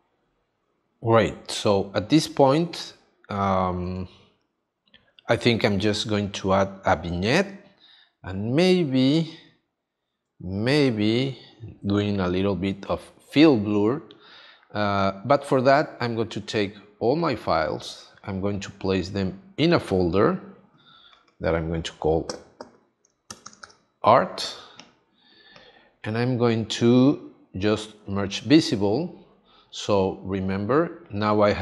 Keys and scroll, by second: 3.9 space, 17.2 x, 23.3 shift+a.